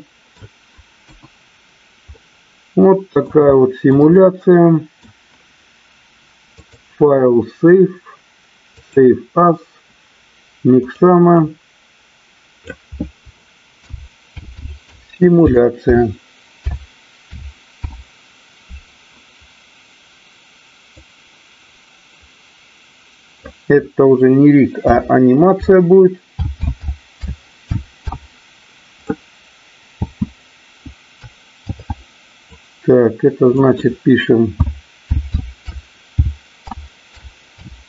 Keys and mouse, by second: 1.0 KP_1, 2.1-3.2 middle drag, 3.5-3.9 shift+middle drag, 4.1-4.9 middle drag, 6.6-9.3 drag.